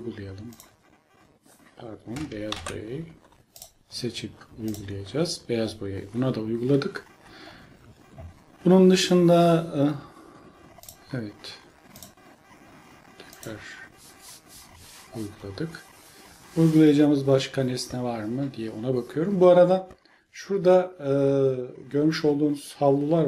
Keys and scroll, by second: 2.5 ctrl+z.